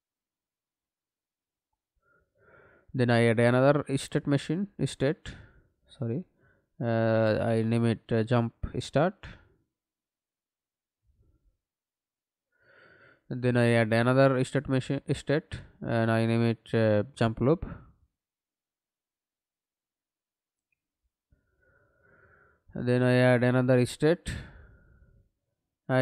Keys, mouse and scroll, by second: 1.2-2.2 typing, 3.0 right click, 8.7-12.6 typing, 12.6 Return, 13.4 right click, 20.1 u, 21.1-23.1 typing.